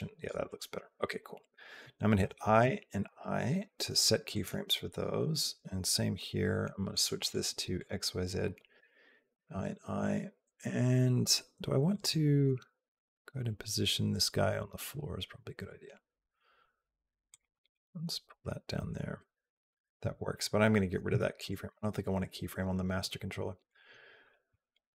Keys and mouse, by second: 2.0 i, 2.4 i, 2.9 i, 4.1 click, 6.7 click, 7.0 click, 8.6 i, 9.1 i, 11.7 click, 12.3 g, 20.9 x, 23.5 click.